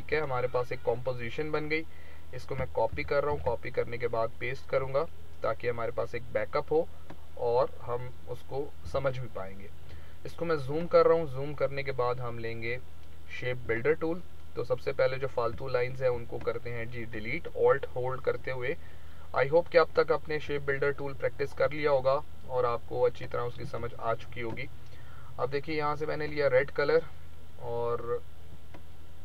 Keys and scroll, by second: 2.8 ctrl+c, 3.2 ctrl+v, 8.8 z, 23.6 space.